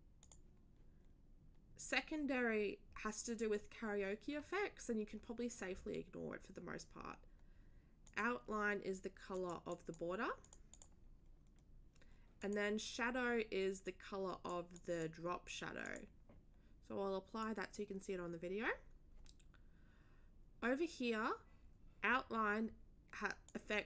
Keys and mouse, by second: 0.2 click, 8.0 click, 9.3 click, 9.7 click, 10.4 click, 12.4 click, 13.8 click, 14.6 click, 14.7 click, 15.8 click, 17.4 click, 23.5 click.